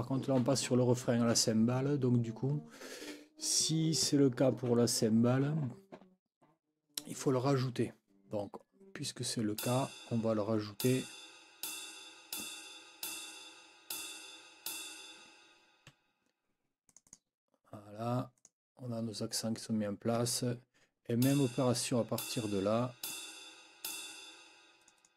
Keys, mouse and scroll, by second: 9.6 click, 10.8 ctrl+click, 11.6 ctrl+scroll up 1, 12.3 ctrl+click, 13.0 ctrl+scroll up 2, 13.9 ctrl+scroll up 2, 14.6-15.0 ctrl+scroll up 2, 15.9 F9, 16.9-17.3 scroll up 2, 18.4 click, 21.2 click, 22.2 ctrl+click, 23.0 ctrl+click, 23.8 ctrl+click, 24.8 click.